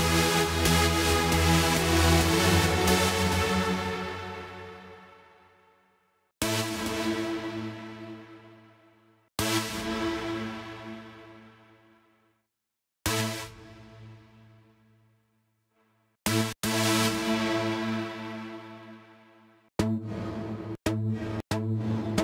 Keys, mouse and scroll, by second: 2.3 F1, 2.9-4.2 right drag, 4.5 right click, 6.7 right click, 8.3 right click, 10.3-10.9 right drag, 11.5-12.0 right drag, 14.7-15.4 right drag, 21.9-22.2 right drag.